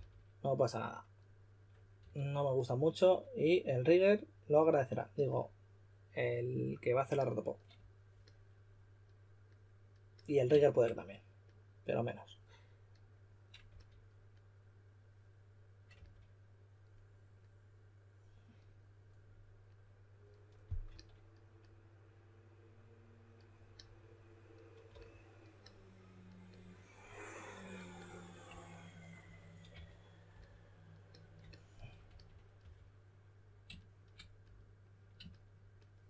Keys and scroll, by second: 1.9 s, 13.6 s, 15.9 typing, 20.8 typing, 24.8 typing, 29.6 d, 32.0-33.0 typing.